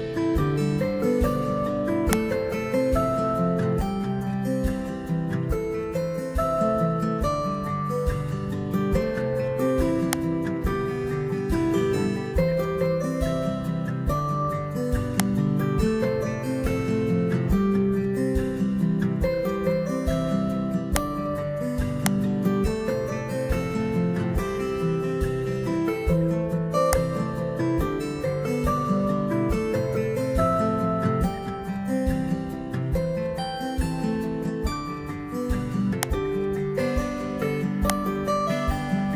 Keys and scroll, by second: 30.2 Return.